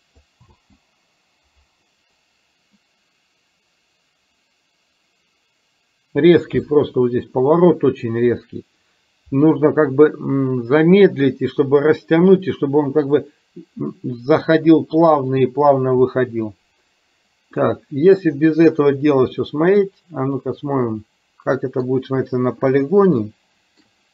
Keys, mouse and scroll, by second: 0.5 space, 17.7-18.2 middle drag, 19.5-22.0 middle drag, 23.2-24.0 shift+middle drag.